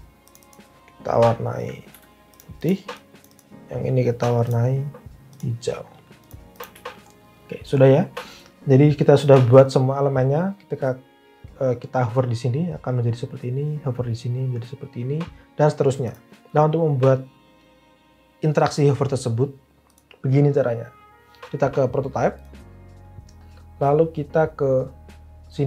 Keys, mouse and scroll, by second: 1.9-3.2 typing.